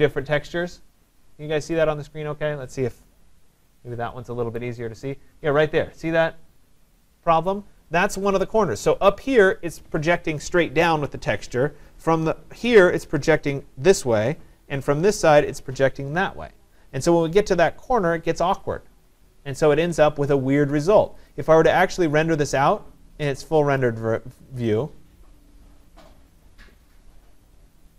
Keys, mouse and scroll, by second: 0.2 right drag, 4.6-9.7 right drag, 21.3 click, 23.8 click.